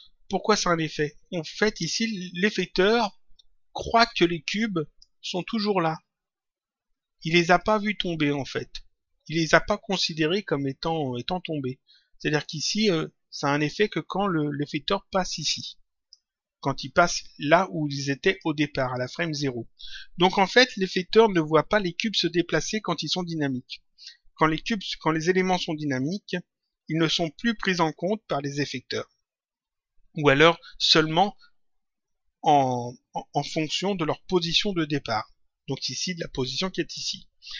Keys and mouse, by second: 7.5 click, 18.1 click.